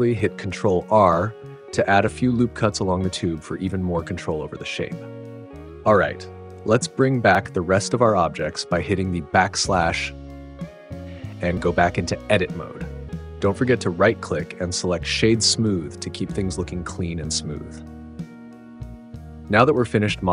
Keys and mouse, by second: 0.2 ctrl+r, 2.6 click, 3.0 click, 6.3 /, 7.6 click, 10.7 Tab, 15.5 /, 16.2 right click, 18.8 /.